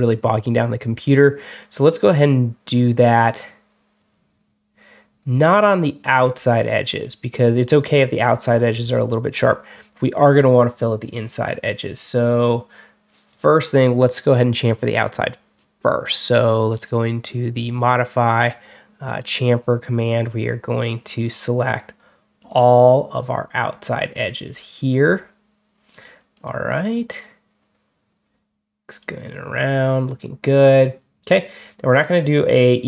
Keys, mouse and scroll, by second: 1.0 click, 1.9 scroll up 2, 17.6 click, 18.9 click, 19.9 click, 20.9 click, 22.3 click, 24.2 click, 26.2 click.